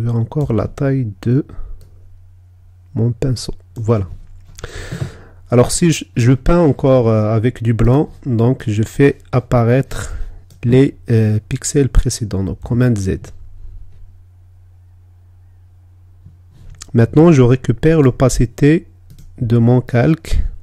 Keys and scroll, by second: 13.2 super+z.